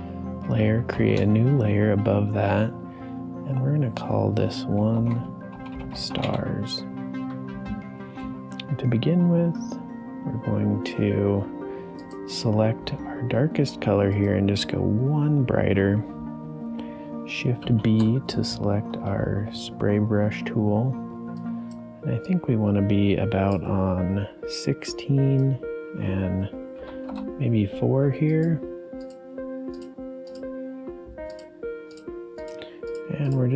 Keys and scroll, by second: 0.9 shift+n, 4.9-6.6 typing, 17.6 shift+b, 26.9 4, 27.0 Return.